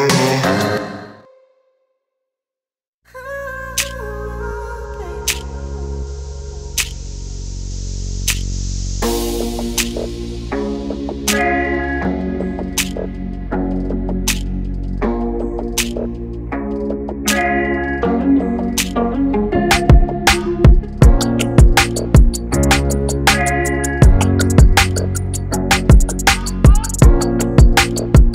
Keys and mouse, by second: 4.0 click, 11.7 Tab, 13.2 click, 14.2 Tab, 15.5 click, 21.2 i, 21.9 click, 22.2 v, 23.8 click, 26.4 Tab.